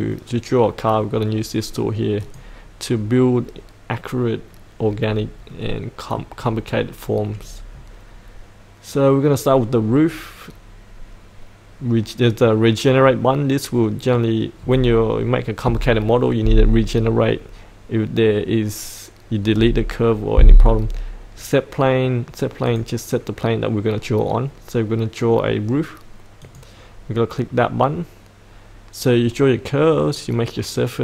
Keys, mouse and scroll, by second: 2.2 click, 5.5 middle click, 5.7 middle click, 6.5-10.0 scroll down 1, 10.0-22.6 scroll up 1, 22.6 click, 27.5-31.0 scroll down 1.